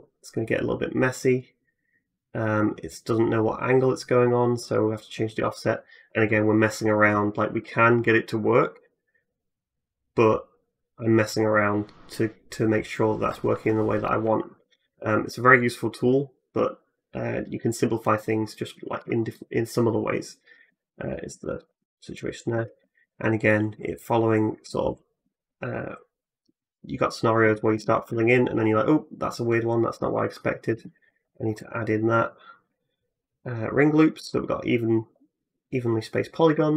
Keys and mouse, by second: 14.4 Tab, 22.0 middle click, 22.0 right click, 22.3 Tab, 23.8 middle click, 23.8 right click, 26.9 middle click, 27.2-31.5 drag, 27.2 f, 27.5 f, 27.8 f, 29.8 ctrl+z, 30.8 ctrl+r, 31.5 middle click, 32.1-36.7 drag, 33.9 middle click, 34.0 f, 36.3 f.